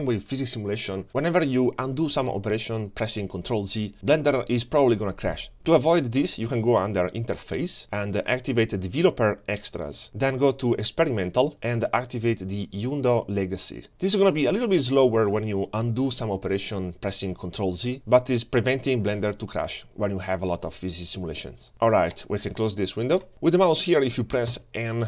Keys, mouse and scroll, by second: 23.3 middle click, 24.5 n.